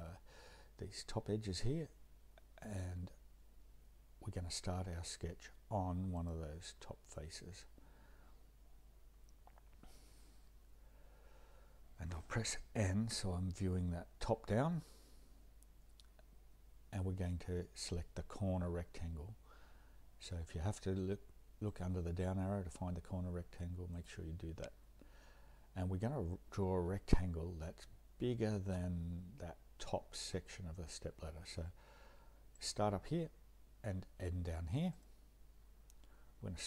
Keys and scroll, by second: 13.1 n.